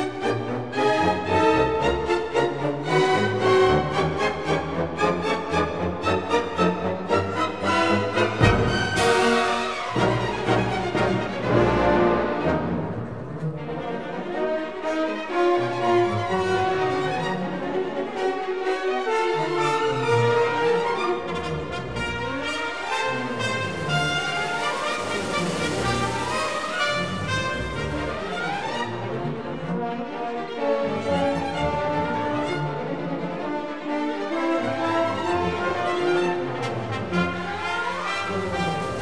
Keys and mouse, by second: 1.6 click, 3.3 i, 3.9 click, 5.4-6.8 drag, 7.6 e, 8.1 click, 9.0-10.5 drag, 9.9 KP_1, 13.8 shift+click, 15.1 shift+click, 17.5 e, 23.7 click, 25.0 click, 25.7 shift+click, 26.7 shift+click, 29.3 shift+click, 30.6 KP_7, 32.4 g, 32.5 x, 34.1 shift+click, 37.8 Tab.